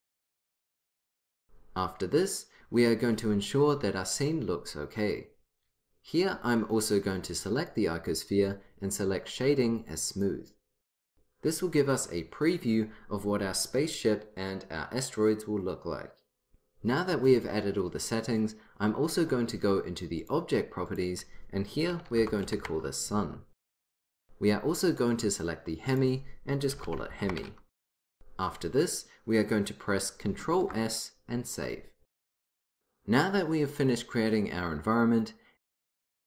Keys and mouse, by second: 7.7-9.5 drag, 10.2-12.2 drag, 20.3-22.9 drag, 25.0-26.0 drag, 26.0 middle click, 31.4 ctrl+s.